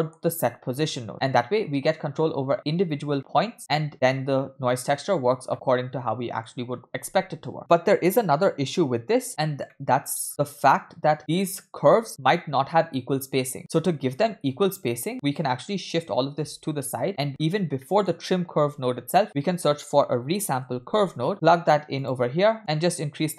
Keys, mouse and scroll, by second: 3.6 middle click, 5.2-5.5 scroll down 1, 5.5-6.5 middle drag, 9.5-10.1 scroll down 2, 9.7-10.1 middle drag, 10.3-12.1 scroll up 4, 13.6 scroll down 2, 13.6 middle click, 14.2-15.4 scroll down 2, 15.4 scroll down 2, 15.4-15.9 drag, 16.8-17.3 drag, 17.3-18.6 scroll up 4, 17.8 middle click, 18.7 shift+a, 22.6 click, 22.7-23.3 scroll up 2.